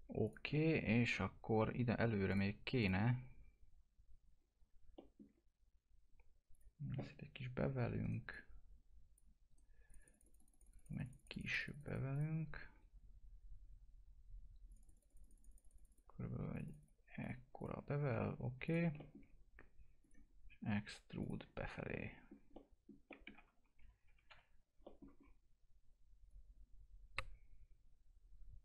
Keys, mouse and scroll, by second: 0.5-2.3 alt+middle drag, 2.3 click, 4.9 alt+middle click, 6.5 click, 8.0 right click, 8.3 click, 9.5 right click, 9.9 click, 14.7 click, 18.9 click, 20.0 click, 21.5-21.8 scroll up 1, 21.9 alt+middle click, 22.5 middle click, 23.3 F3, 24.8 middle click, 25.2-25.6 scroll up 1, 26.3-28.6 drag.